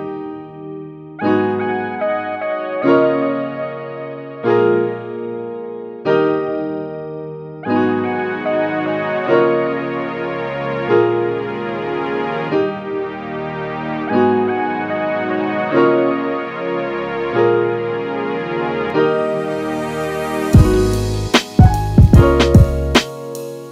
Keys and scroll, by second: 12.8 space, 18.7 super+s, 19.2 Right.